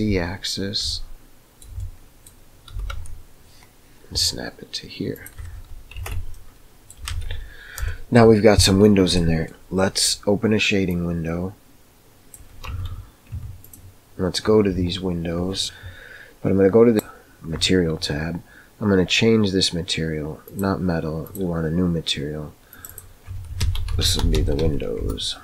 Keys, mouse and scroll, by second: 0.9-2.4 shift+middle drag, 2.6 g, 5.9 Tab, 6.3-7.0 middle drag, 7.2 alt+a, 8.8 middle click, 9.4 middle click, 10.8-12.3 drag, 12.6 Tab, 13.3 Tab, 20.4 drag, 21.2-21.7 drag, 22.7-25.4 drag.